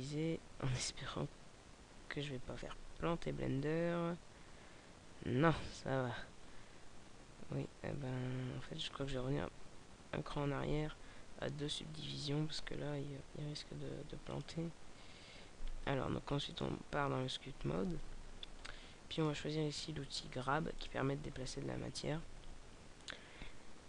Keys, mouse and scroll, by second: 18.0-18.6 scroll up 1, 18.6-19.1 scroll up 1, 19.1 click.